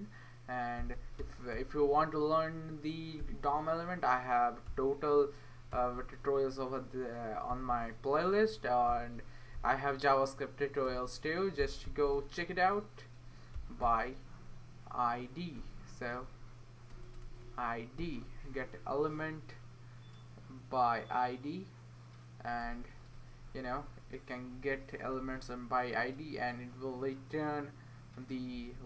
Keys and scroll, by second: 0.0-6.2 typing, 7.3-9.5 typing, 10.6-12.1 typing, 13.3-14.0 typing, 15.3-18.5 typing, 23.3 typing, 24.8-25.5 typing.